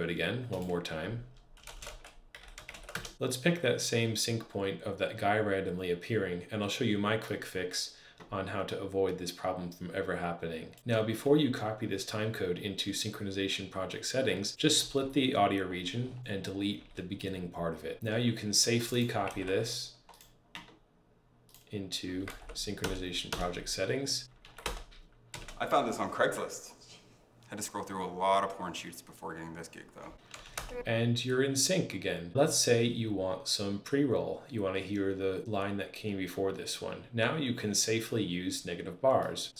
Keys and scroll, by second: 1.4-3.1 typing, 14.6 super+t, 16.6 BackSpace, 19.1 super+c, 22.1 super+v, 22.6 Return, 24.3 super+`, 24.5 Return, 25.2 space, 30.2 space, 30.4 Return.